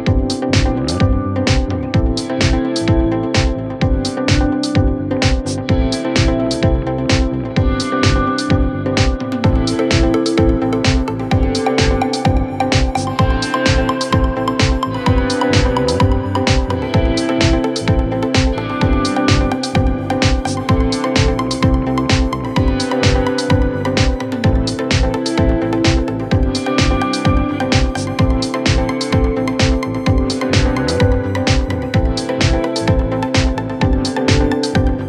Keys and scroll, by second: 5.5 F3, 12.6 F2, 13.4 F3, 16.2 shift+F2, 16.3 F3, 21.1 F3, 22.0 shift+F2, 22.2 F3, 24.6 F4, 26.7 c.